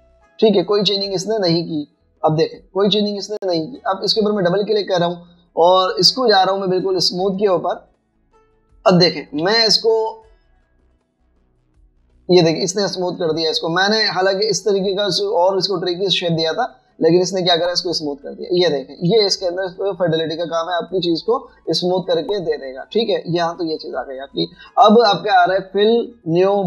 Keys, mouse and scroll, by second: 5.2 double click, 9.4 alt+scroll down 1, 9.7 space, 10.7-11.0 alt+scroll up 2, 14.2 space, 19.4-20.4 typing, 20.0 alt+scroll down 3, 23.5 double click.